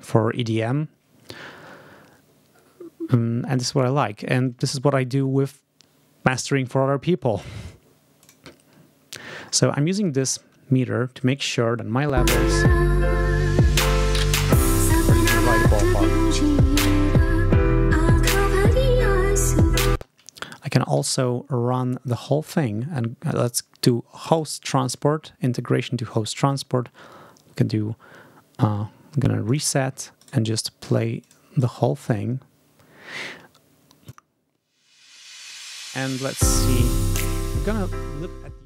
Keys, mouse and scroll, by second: 8.1 click, 10.1 click, 12.0 space, 14.2 scroll up 2, 19.8 space, 20.3 ctrl+scroll down 2, 21.7 click, 24.2 click, 29.3 click, 30.1 right click, 31.1 click, 31.5 right click, 33.9 click.